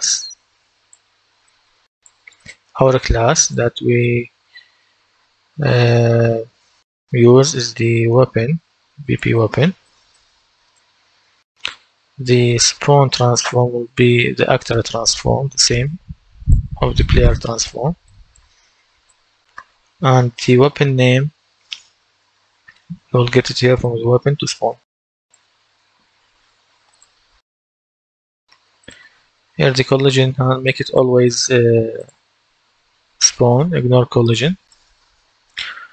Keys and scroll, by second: 13.6-16.2 typing.